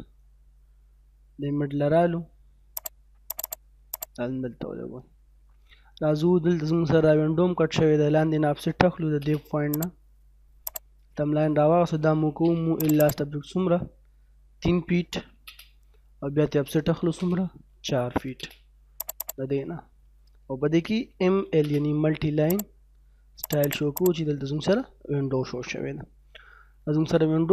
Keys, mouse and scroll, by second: 2.7 click, 3.4 right click, 4.0 click, 4.4 middle click, 4.9 scroll down 1, 5.1 middle click, 5.8 scroll down 1, 6.1 middle click, 7.4 scroll up 1, 8.7 l, 8.9 space, 9.8 click, 12.0-12.6 typing, 12.8 right click, 13.0 click, 14.5-15.2 typing, 15.5 middle click, 16.7-18.1 typing, 19.0 click, 19.5-20.8 scroll down 1, 20.8-21.3 typing, 21.7-22.5 scroll up 1, 22.5 click, 23.6 right click, 24.0 click, 24.5-24.9 scroll down 1, 24.9-27.5 middle drag.